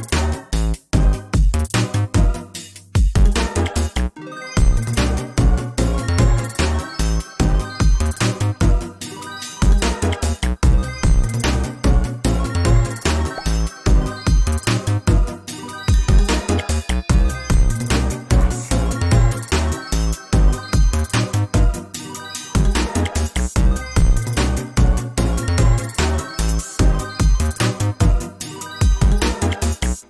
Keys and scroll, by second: 18.9 ctrl+space.